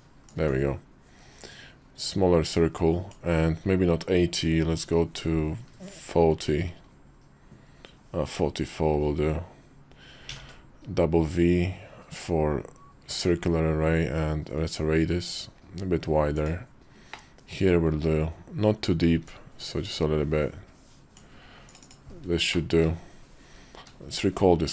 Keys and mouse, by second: 0.1-16.5 ctrl+drag, 17.1 middle click, 22.3 shift+middle click, 22.9 KP_5, 23.5 q.